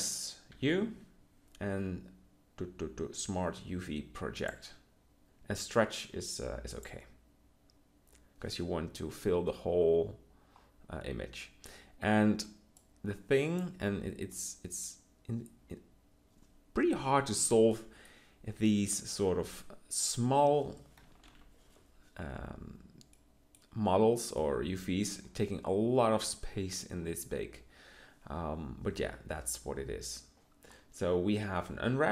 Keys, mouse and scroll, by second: 0.4 u, 21.2 ctrl+l.